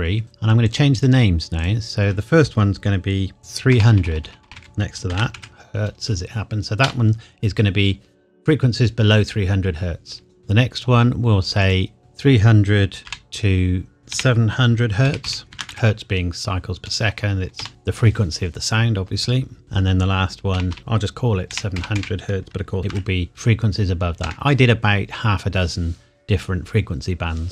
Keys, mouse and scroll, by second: 3.4-5.3 typing, 6.8 Return, 10.4 click, 12.0 BackSpace, 13.0 -, 14.1-15.7 typing, 17.6 Return, 19.6 click, 20.5-22.9 typing, 24.2 KP_Enter.